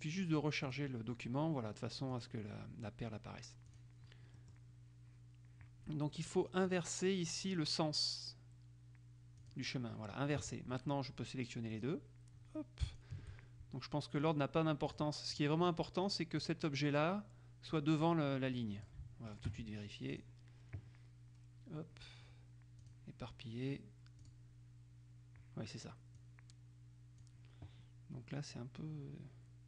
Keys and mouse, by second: 0.8 click, 2.3 click, 3.8 click, 6.8 click, 9.6 click, 11.9 click, 13.0 shift+click, 14.4 click, 17.9-19.5 drag, 20.3 click, 23.0 click, 24.4 click, 27.4 click.